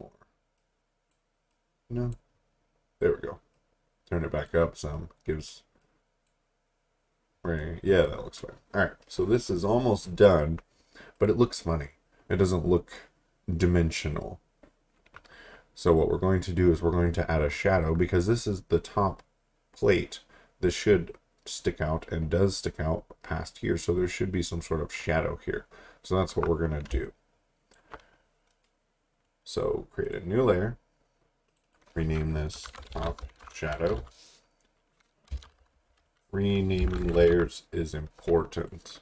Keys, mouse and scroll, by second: 11.1 click, 15.5 alt+Num_Lock, 15.7-16.7 alt+scroll up 3, 17.1 alt+scroll down 1, 25.0 alt+Num_Lock, 25.1 alt+scroll down 1, 26.6 scroll down 1, 26.9 space, 27.0 click, 27.5 space, 28.9-30.1 scroll down 1, 30.1 click, 31.0-31.5 scroll up 1, 31.5 click, 32.4-35.3 typing, 36.6-37.8 typing, 38.6 click.